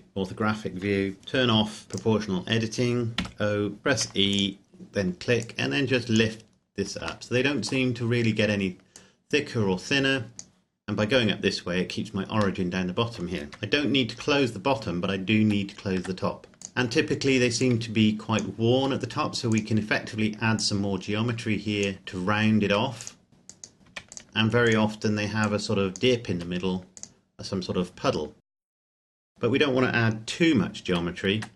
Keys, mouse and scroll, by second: 2.0 click, 3.2 o, 4.0 e, 4.4 click, 6.6-7.0 scroll down 1, 7.3 shift+middle click, 9.0 click, 12.6 middle click, 13.5 KP_Decimal, 15.4 Tab, 16.4 e, 16.6 click, 18.8 s, 19.6 click, 22.7 e, 23.0 click, 23.3 s, 23.5 click, 23.9 e, 24.0 click, 24.2 s, 24.6 click, 26.4 s, 27.0 click, 28.7 e, 28.9 click, 29.1 e, 29.3 click, 30.9 f, 31.4 Tab.